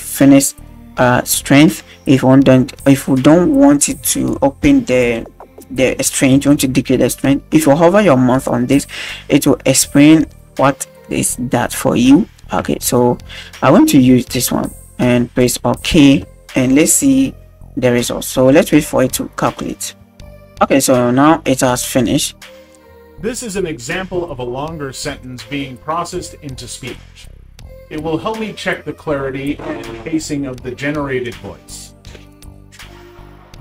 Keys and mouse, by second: 20.8-21.1 middle drag, 22.9 space, 25.4-25.7 drag, 27.1 click, 27.5 click.